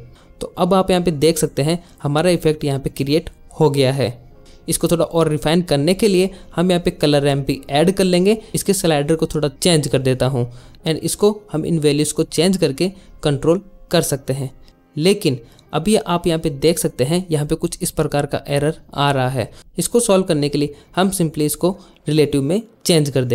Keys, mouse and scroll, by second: 1.2-3.2 shift+middle drag, 3.9 click, 4.2 click, 4.4 click, 4.7 click, 4.9 click, 5.4 g, 6.0 ctrl+z, 6.3 g, 6.6 shift+a, 8.4 drag, 8.8 click, 8.9 click, 9.1 click, 10.3-11.3 shift+drag, 11.6 ctrl+z, 12.0-14.7 drag, 14.7 ctrl+z, 15.7-17.9 drag, 18.3 click, 23.1 click.